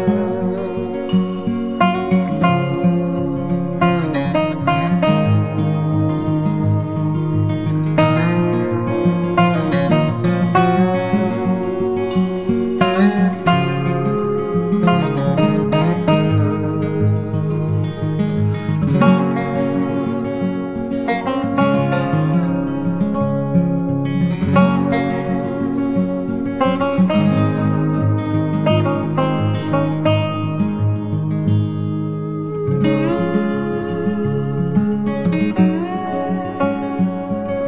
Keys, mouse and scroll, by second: 0.0-0.2 typing, 1.3 typing, 7.7 typing, 18.8-22.1 scroll down 1, 29.0-32.5 scroll up 1, 32.9 typing.